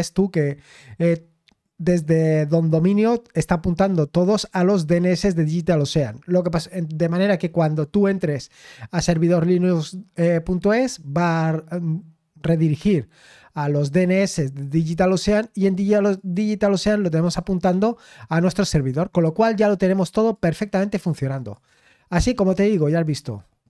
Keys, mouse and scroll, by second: 1.2-1.9 scroll up 2, 2.1 scroll up 2, 3.8-4.3 scroll down 2, 4.3-6.5 scroll up 2, 16.1 click, 17.9-18.2 scroll down 1, 20.3 click, 21.3 click, 23.0 click, 23.3 click.